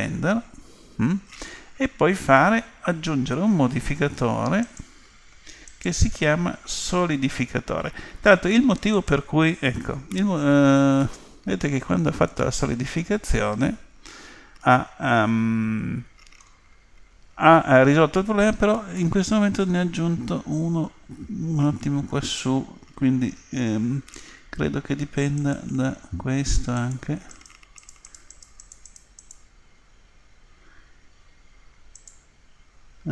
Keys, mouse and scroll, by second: 4.6-7.7 drag, 11.0-13.1 middle drag, 19.0-20.9 middle drag, 25.4-31.1 drag, 32.0-33.1 drag.